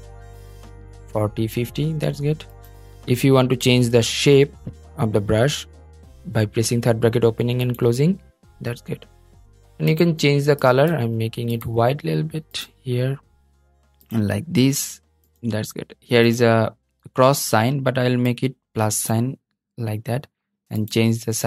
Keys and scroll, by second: 3.3 ], 21.2 ].